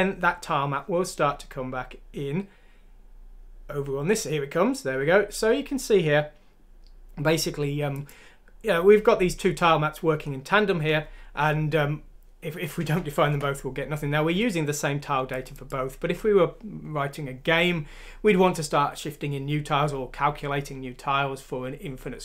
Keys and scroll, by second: 13.3 BackSpace.